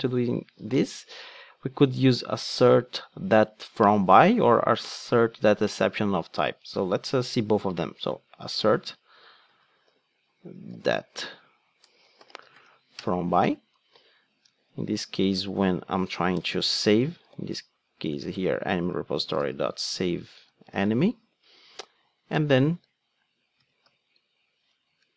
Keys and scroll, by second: 13.0 Return, 18.3 Return.